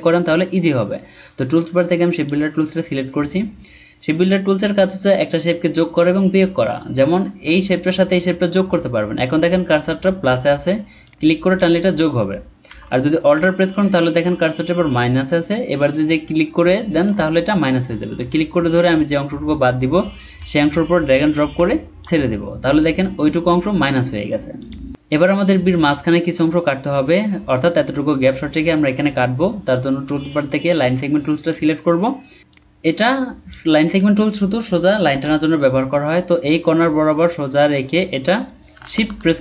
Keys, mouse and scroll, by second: 3.5-4.9 scroll up 1, 12.7 ctrl+z, 18.2 alt+click, 30.7 right click, 35.1 BackSpace, 38.8 shift+click.